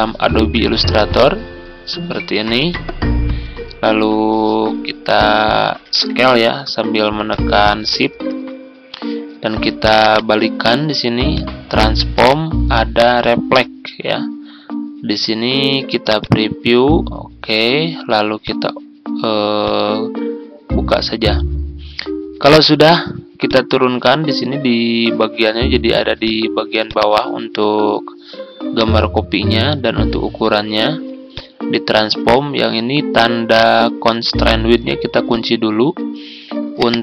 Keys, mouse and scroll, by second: 5.8 ctrl+z, 7.2 shift+click, 8.3-9.8 drag, 10.0 right click, 11.2-37.0 drag.